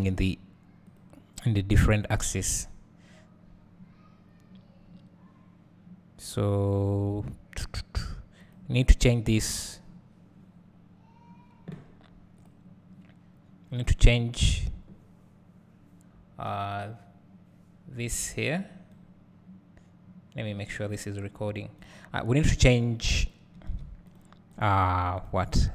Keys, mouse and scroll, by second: 1.0 click, 1.5 click, 13.8 click, 23.6 alt+a, 24.2 click, 24.6 click, 25.6 click.